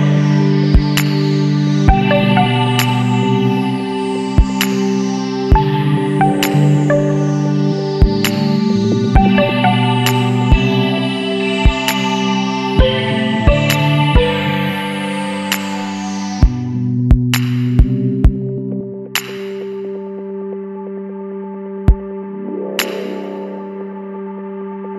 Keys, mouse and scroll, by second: 0.1-0.5 scroll up 2, 0.9 scroll up 2, 3.4 click, 4.9 click, 6.3-7.1 scroll up 4, 8.7 click, 10.2 click, 12.4 click, 12.9-13.7 scroll up 2, 14.5 click, 16.3 click, 18.9 click, 20.5 KP_3, 20.9 KP_Enter, 23.4 click, 24.3-24.8 scroll down 2.